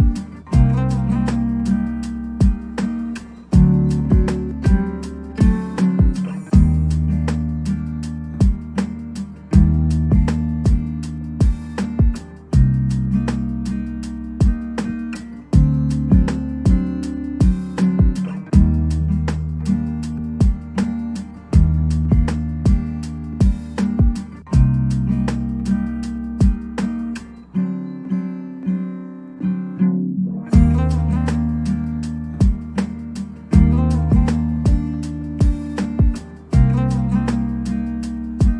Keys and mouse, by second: 0.5 shift+middle click, 1.1 middle click, 1.1 f, 1.3 KP_Decimal, 1.5 middle click, 1.7 shift+click, 2.3 f, 2.5 middle click, 2.7 middle click, 2.9 shift+click, 3.3 middle click, 3.8 shift+middle click, 3.8 f, 4.3 shift+middle click, 4.8 middle click, 4.8 f, 5.4 shift+middle click, 5.6 ctrl+s, 5.6 middle click, 6.0 middle click, 6.2 middle click, 6.3 middle click, 6.9 middle click, 7.0 shift+click, 7.1 middle click, 7.3 ctrl+z, 7.4 shift+click, 7.5 f, 7.7 shift+click, 8.0 KP_Decimal, 8.6 ctrl+f, 8.7 ctrl+z, 8.8 ctrl+z, 8.9 ctrl+z, 9.2 middle click, 9.6 shift+middle click, 9.6-12.0 typing, 9.8 middle click, 10.2 ctrl+z, 10.3 middle click, 11.8 middle click, 12.0 middle click, 12.2 ctrl+a, 12.2 ctrl+s, 12.2 right click, 12.4 ctrl+s, 12.4 shift+middle click, 12.6 Tab, 12.6 middle drag, 13.3 KP_1, 13.4 shift+middle click, 13.5 Tab, 13.6 3, 14.1 ctrl+KP_7, 14.4 c, 14.9 KP_1, 15.4 middle click, 15.7 middle click, 15.9 middle click, 16.1 middle click, 16.3 KP_1, 17.0 e, 17.1 z, 17.3 click, 18.2 shift+middle click, 18.3 alt+2, 18.8 ctrl+shift+b, 19.3 shift+middle click, 19.6 s, 19.7 z, 20.0 right click, 20.9 s, 20.9 e, 21.0 Tab, 21.5 ctrl+b, 21.8 shift+click, 21.9-24.0 typing, 22.2 Tab, 22.7 middle click, 23.1 shift+click, 23.8 click, 24.0 Tab, 25.7 click, 25.9 g, 25.9 z, 26.1 right click, 26.3 click, 26.3 s, 26.5 shift+middle click, 27.0 click, 27.4 click, 27.8 shift+middle click, 28.2-31.3 typing, 28.5 drag, 28.7 middle click, 30.0 middle click, 30.7 click, 31.3 click, 31.6 Tab, 31.7 Tab, 32.3 KP_1, 32.5 Tab, 32.6 ctrl+r, 33.6 click, 34.2-37.8 typing, 35.3 click, 35.7 click, 36.8 middle click.